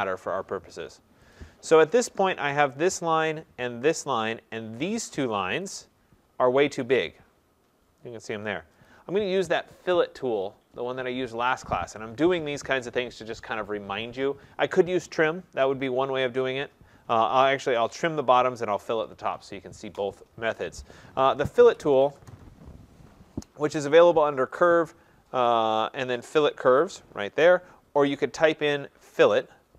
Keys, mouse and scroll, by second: 1.4 click, 2.9 click, 4.1 click, 5.0 click, 5.8 click, 6.2 middle click, 6.3 middle click, 6.7 middle click, 6.8 middle click, 7.9 middle click, 8.9 click, 21.5-22.0 typing, 22.2 Return, 24.6 click, 28.5 click.